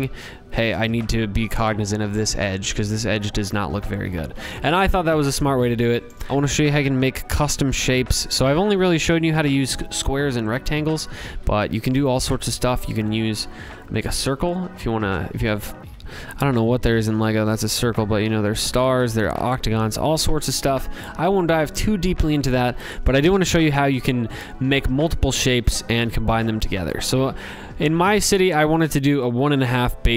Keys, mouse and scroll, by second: 3.1 ctrl+z, 3.6 ctrl+z, 4.0 ctrl+z, 5.1 click, 6.3 click, 9.7 click, 10.9 ctrl+z, 11.6 click, 14.4 click, 14.8 ctrl+z, 16.8 click, 18.2 click, 18.4 ctrl+z, 24.5 click, 25.8 click, 26.2 scroll, 26.2 scroll down 4, 27.2 scroll, 27.3 click.